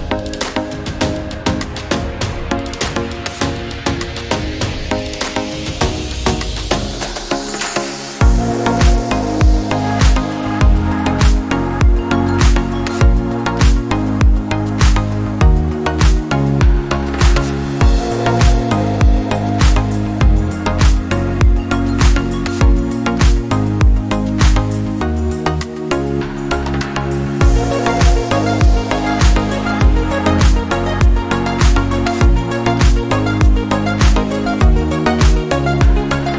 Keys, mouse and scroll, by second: 0.3 click, 2.1-20.3 drag, 21.1 right click, 21.7-24.5 drag, 24.5-27.4 alt+shift+drag, 27.9 click, 33.5 click.